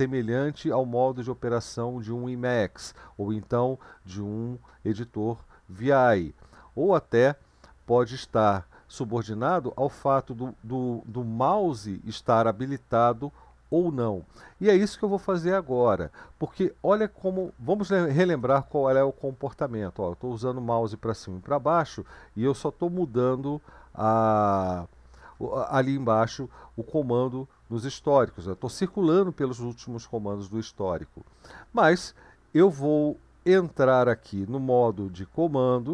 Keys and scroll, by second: 17.4 Up, 18.3 Return.